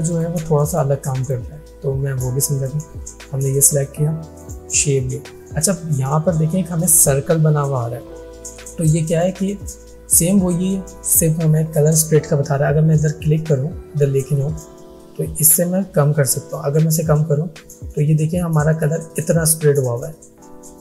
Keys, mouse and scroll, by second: 1.0 space, 1.1 click, 1.8 alt+scroll up 1, 2.6 click, 14.6-17.1 drag.